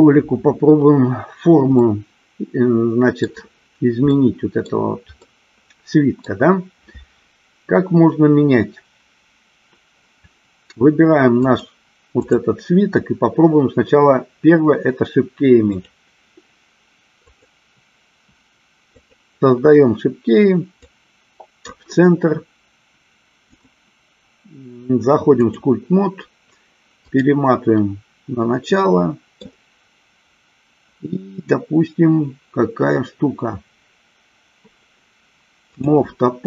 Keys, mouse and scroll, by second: 2.1-3.5 middle drag, 4.4 middle click, 5.7 middle click, 11.5 click, 12.4 click, 16.1 click, 17.4 click, 19.2 click, 21.2 click, 23.7-26.1 drag, 27.3 click, 28.9 middle click.